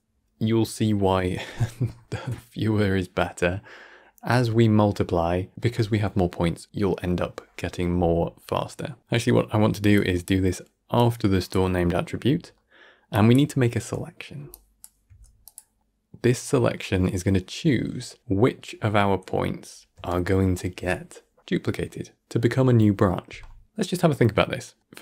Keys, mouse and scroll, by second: 12.4-13.0 middle drag, 13.0-13.8 drag, 13.8 middle click, 14.4-15.7 drag, 15.7-18.2 middle drag, 18.2 shift+space, 24.1 scroll down 1, 24.3 middle click.